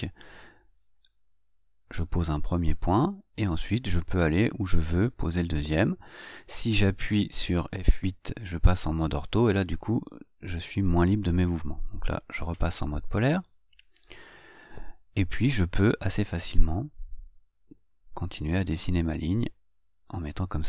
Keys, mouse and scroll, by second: 1.0 click, 12.6 F8, 16.7 click, 18.8 click.